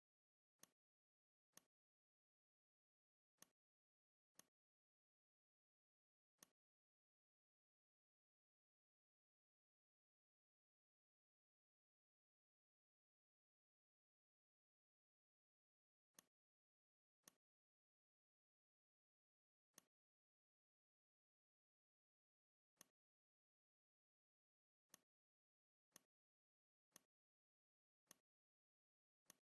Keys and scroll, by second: 0.3 v, 2.5 ctrl+z, 4.6 space, 5.8 v, 9.2 ctrl+c, 11.7 ctrl+b, 14.3 shift+x.